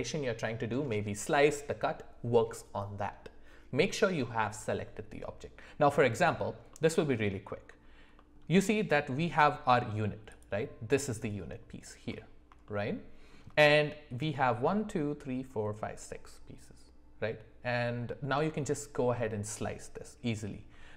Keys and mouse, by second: 12.6 shift+middle click.